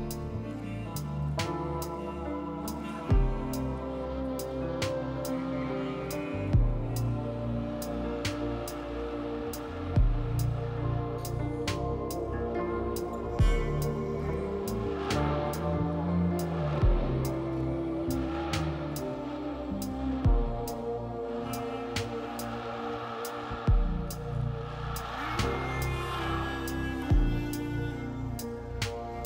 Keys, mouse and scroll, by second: 20.5 F4.